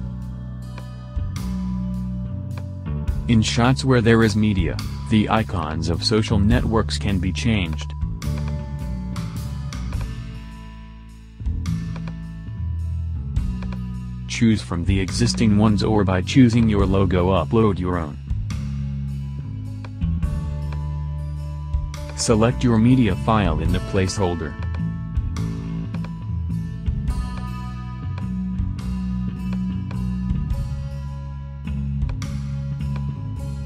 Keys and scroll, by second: 10.1 Up, 10.9 Return.